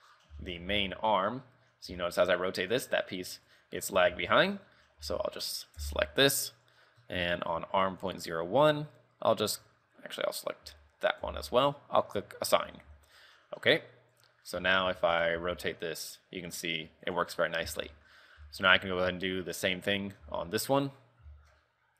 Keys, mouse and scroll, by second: 0.1-0.4 scroll down 6, 0.5 shift+middle click, 0.8 z, 1.0 middle click, 1.5 scroll up 3, 2.1 r, 3.8 right click, 4.2 Tab, 4.4 shift+middle click, 4.8-5.2 scroll up 6, 5.2 a, 6.0 l, 6.6-8.0 scroll up 13, 8.2 click, 10.8 ;, 11.4 l, 12.2 click, 12.6-13.6 scroll down 8, 12.8 a, 13.2 Tab, 13.6 middle click, 14.5 middle click, 14.7 KP_3, 15.1 shift+middle click, 15.1 shift+middle click, 15.6 r, 17.5 scroll up 4, 17.8 z, 18.1 shift+middle click, 18.3 scroll up 2, 18.6 shift+middle click, 19.9 right click, 20.5 Tab, 20.8 middle click, 21.5 shift+middle click, 21.8-21.9 scroll up 2.